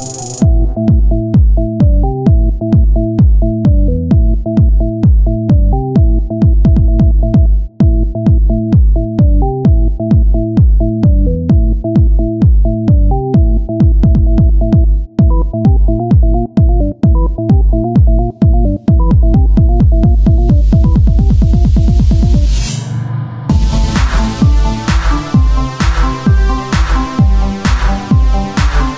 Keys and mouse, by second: 0.8-3.7 right drag, 2.5 s, 3.7 Tab, 4.9 Tab, 4.9-6.1 right drag, 6.1 s, 7.3 Tab, 8.9 KP_1, 9.5 z, 12.8-13.9 drag, 13.9 Tab, 15.1 ctrl+r, 15.6 Tab, 16.2-17.5 drag, 19.0 Tab, 19.6 right click, 20.0-21.9 drag, 21.2 right click, 21.9 x, 23.5-25.5 drag.